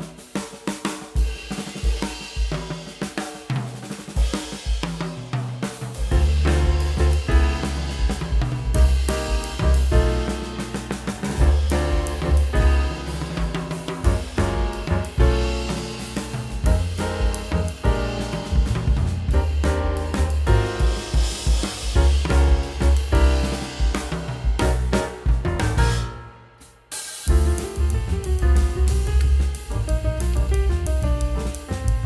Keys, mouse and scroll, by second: 9.4 Delete, 13.4 middle click, 15.6 w, 16.4 w, 26.1 middle click.